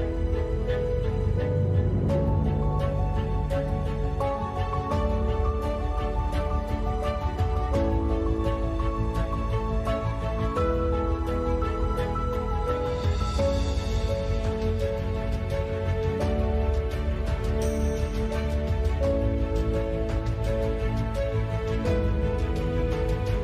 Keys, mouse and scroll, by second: 0.0 a, 0.1 ctrl+s, 3.1-5.9 typing, 7.8 g, 8.3 s, 10.0 Tab, 10.2 f, 10.6 e, 12.0-14.9 typing, 12.4 Tab, 13.7 Tab, 16.5-20.1 drag, 18.1-19.7 typing, 20.3 click, 20.7 ctrl+r, 20.8 click, 21.0 z, 21.3 z, 21.4 g, 21.6 s, 23.1 Tab, 23.2 click, 23.3-23.4 typing.